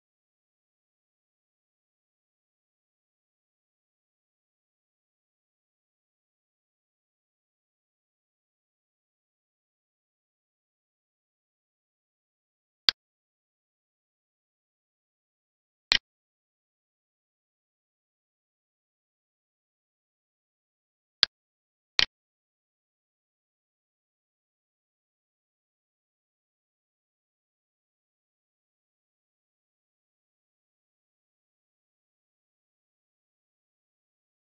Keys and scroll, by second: 0.7 alt+e, 26.2 alt+e.